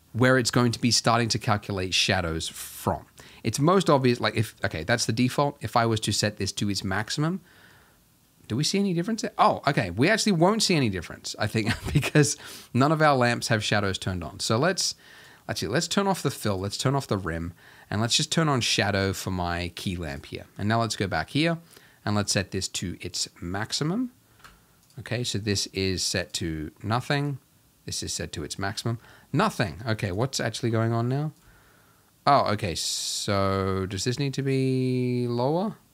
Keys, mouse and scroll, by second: 1.7-2.7 scroll up 1, 2.7-7.0 scroll up 1, 7.9 scroll down 2, 8.2-10.4 scroll up 2, 10.4-11.6 drag, 15.2 click, 16.5 click, 18.2 click, 23.2-34.4 drag.